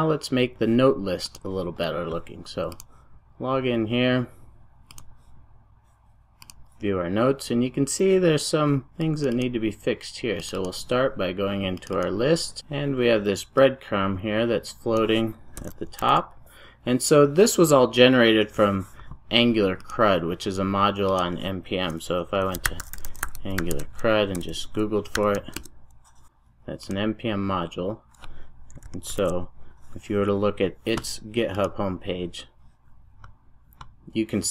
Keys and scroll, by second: 16.1 super+s.